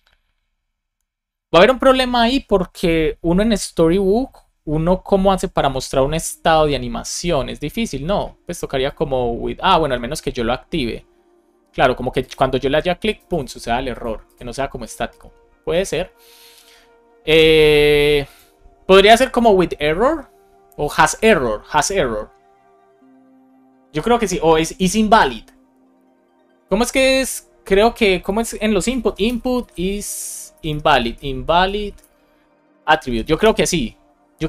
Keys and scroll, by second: 29.3 space, 30.6 BackSpace, 33.0 Down, 33.4 Return.